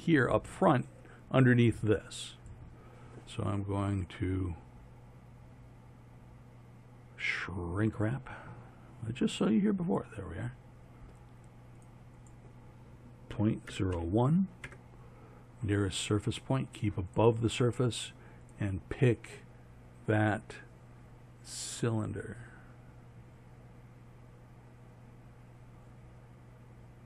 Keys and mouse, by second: 4.0-6.4 middle drag.